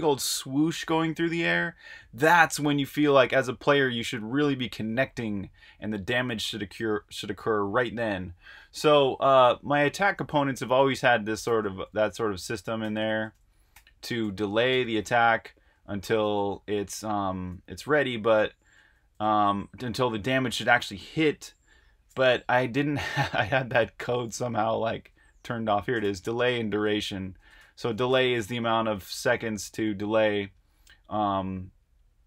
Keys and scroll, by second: 0.0-0.6 typing, 3.9-4.6 typing, 9.5 super+Tab, 10.1-14.7 typing, 15.7-16.8 typing, 18.2-19.0 typing, 22.1-28.1 typing.